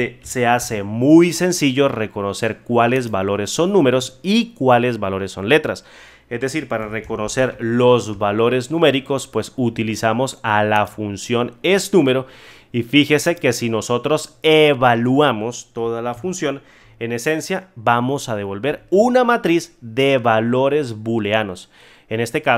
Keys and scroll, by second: 0.5 ctrl+z, 18.6 F9.